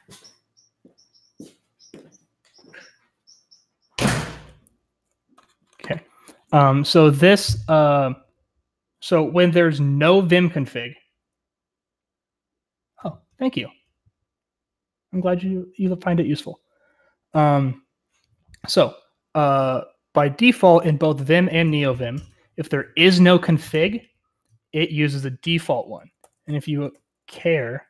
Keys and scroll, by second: 26.4 super+/.